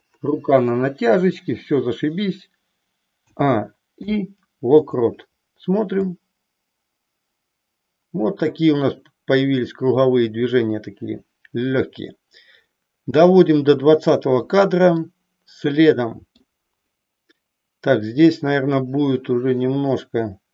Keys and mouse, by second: 3.2 a, 4.0 i, 6.1-14.1 drag, 15.0-16.4 middle drag, 16.9 click, 18.2-20.5 middle drag.